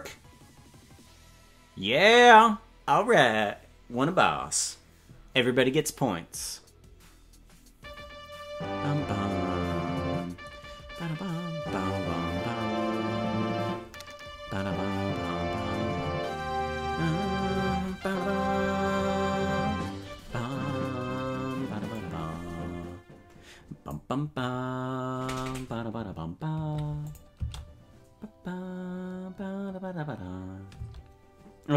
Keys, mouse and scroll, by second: 27.1 click, 27.3 space, 31.2 space.